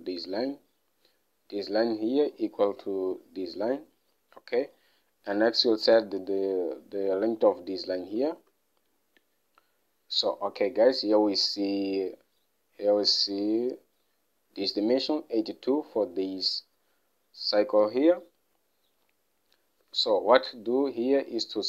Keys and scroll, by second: 8.7 alt+Tab, 20.5 alt+Tab.